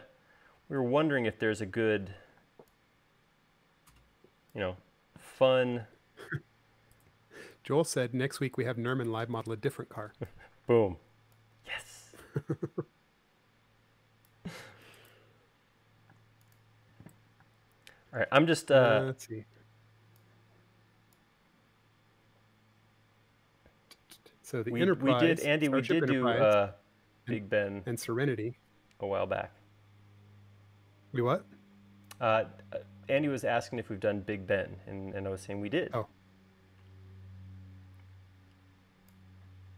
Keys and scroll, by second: 2.5 p, 5.2 e, 16.4 space, 17.7 space.